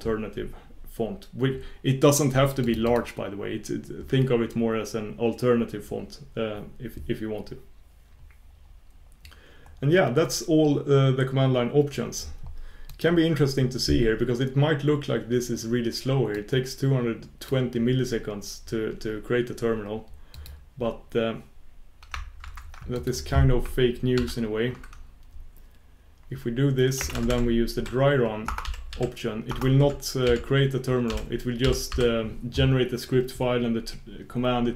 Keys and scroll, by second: 20.4 shift+super+q, 22.4 shift+super+q.